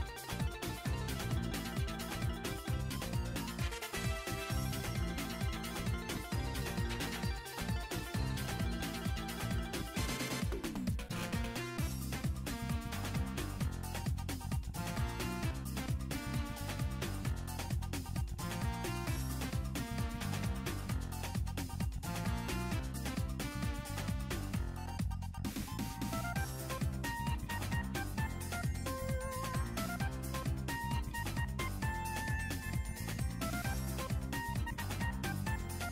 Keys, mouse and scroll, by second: 0.0-0.9 scroll up 7, 0.2 middle click, 1.0 shift+middle click, 1.7 click, 6.8-8.3 drag, 8.4-9.2 scroll down 2, 9.2-9.5 scroll down 1, 10.7 click, 15.1 r, 16.8 click, 17.1 r, 19.5 click, 19.7-20.0 scroll down 3, 20.0 scroll up 1, 20.4 alt+h, 21.0 click, 21.2 scroll up 1, 21.5 click, 22.0-22.5 scroll up 2, 22.3 click, 23.9 alt+g, 24.6 g, 26.5 click, 26.9 scroll down 2, 27.1 shift+middle click, 27.3 shift+middle click, 27.6 scroll up 3, 27.8 shift+middle click, 28.0 middle click, 28.4 scroll down 2, 28.4 shift+middle click, 28.7 scroll up 2, 28.8 middle click, 29.0 scroll down 2, 29.1 middle click, 29.5 click, 30.2-30.6 scroll up 2, 30.3-33.3 middle drag, 30.8 click, 31.5 alt+g, 32.5-33.3 scroll down 2, 32.9-33.3 scroll up 1, 33.3 click, 34.0 middle click, 34.0-34.4 scroll down 1, 34.6 click, 35.5 click.